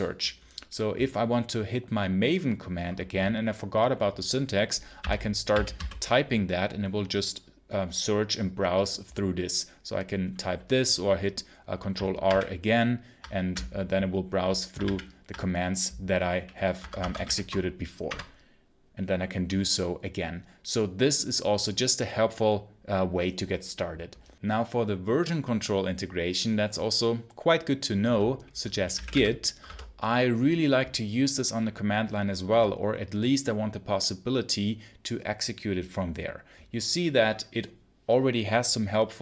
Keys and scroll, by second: 4.9-6.1 typing, 12.1 ctrl+r, 14.7 ctrl+r, 16.6 Escape, 17.1 shift+a, 17.9 Return, 28.5-29.5 typing.